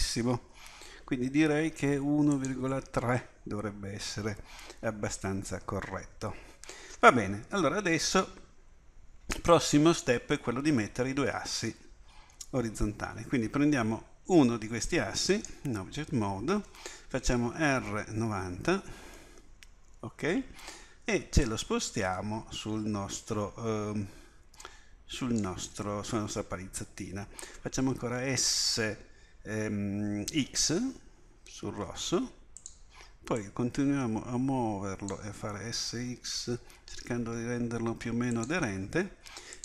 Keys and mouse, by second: 2.4-5.1 drag, 15.3 click, 17.6 r, 21.5-25.4 drag, 27.8 s, 33.4-35.1 drag, 35.5 s.